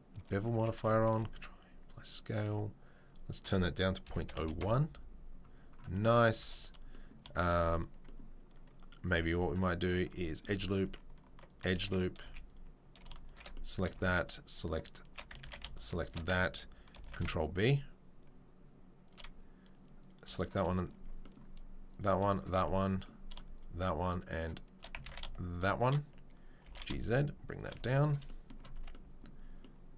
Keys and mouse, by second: 0.5 Tab, 1.0 ctrl+a, 2.4 Tab, 3.2-7.2 right drag, 5.9 Tab, 6.4 Tab, 9.2 ctrl+r, 10.8 ctrl+r, 12.2 z, 12.9 alt+click, 13.3 shift+right click, 13.4 click, 15.1-20.3 ctrl+shift+middle drag, 15.4 ctrl+z, 16.9 ctrl+b, 20.3 shift+right click, 20.4-22.3 shift+middle drag, 22.3 shift+right click, 22.4-23.5 shift+middle drag, 23.5-24.8 shift+right drag, 24.8 ctrl+middle click, 25.0 ctrl+z, 25.5 shift+right click, 25.9-29.9 middle drag, 26.6 g, 27.7 z, 28.7 Tab.